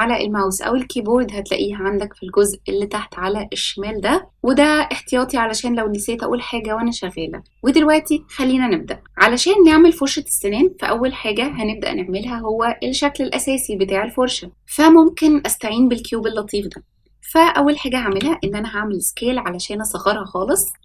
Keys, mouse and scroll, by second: 9.0 middle click, 10.3-11.0 scroll up 1, 11.0-11.5 scroll up 1, 11.5-14.0 scroll up 2, 18.0 s.